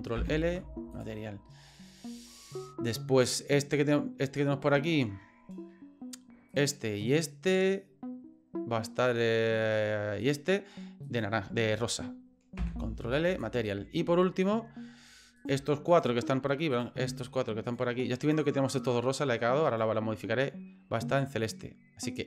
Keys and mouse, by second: 0.2 ctrl+l, 3.3 right click, 6.5 shift+right click, 7.0 shift+right click, 10.2 shift+right click, 11.0 shift+right click, 12.6 ctrl+l, 15.4 right click, 15.9 shift+right click, 16.7 right click, 17.7 shift+right click, 18.2 shift+right click, 19.7 shift+right click.